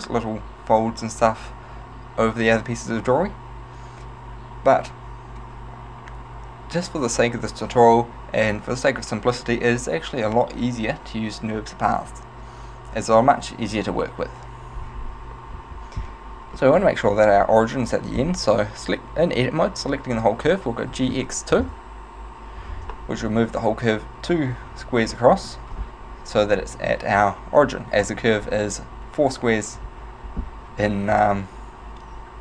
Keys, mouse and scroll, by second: 16.7 middle click, 20.9 g, 25.2 shift+middle click, 28.5-29.9 scroll down 2, 31.2 z.